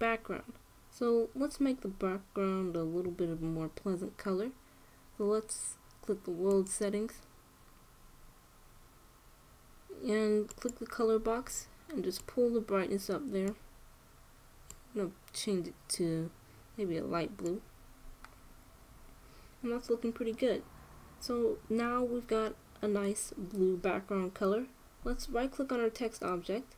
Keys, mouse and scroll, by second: 7.2-9.2 drag, 11.2-13.3 drag.